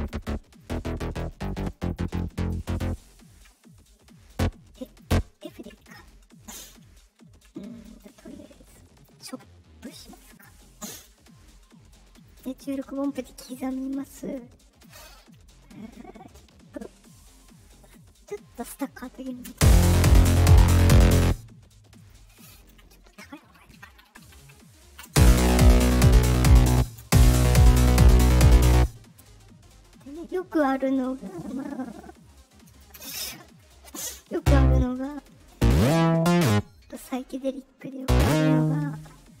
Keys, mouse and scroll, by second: 0.1 click, 0.5 click, 0.7 click, 0.8 click, 1.0 click, 1.2 click, 1.4 click, 1.6 click, 1.8 click, 1.9 click, 2.2 click, 2.5 click, 2.6 click, 3.5 scroll up 2, 4.2 click, 4.9 click, 7.8-8.9 drag, 10.0 click, 10.8 click, 12.2 click, 13.2 middle click, 14.3 ctrl+click, 15.9-18.5 drag, 19.4 space, 21.1 space, 22.0 ctrl+click, 24.4 shift+Up, 25.0 space, 26.6 space, 26.9 space, 28.7 space, 31.9 click, 33.5 right click, 34.3 click, 35.0 right click, 35.4-36.4 drag, 36.7 right click, 37.0 right click, 37.9-39.4 drag.